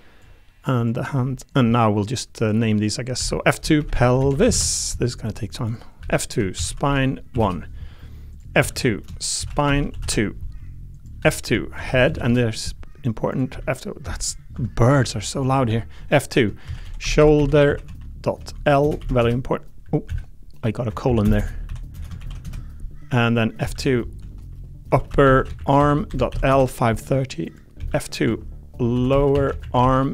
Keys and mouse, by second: 1.1 g, 1.7 middle click, 2.5 click, 3.2 F2, 5.6 click, 6.0 F2, 8.3 click, 8.6 F2, 11.2 F2, 13.3 click, 13.5 F2, 15.7 F2, 20.0 F2, 21.3 BackSpace, 21.6 ., 23.6 F2, 25.2 p, 27.8 F2.